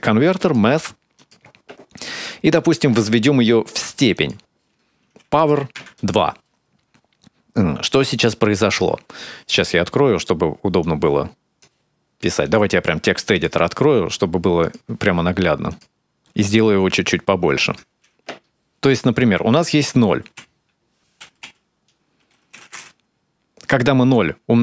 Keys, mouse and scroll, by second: 1.9 click, 4.1 click, 5.2 click, 10.6 click, 12.2 click, 13.3 click, 13.9 click, 14.2 click, 14.7 ctrl+middle click, 15.1-15.8 scroll up 3, 16.0 typing, 16.4 ctrl+middle click, 16.9-18.2 ctrl+scroll up 41, 18.6 click, 20.6 0, 21.6 0.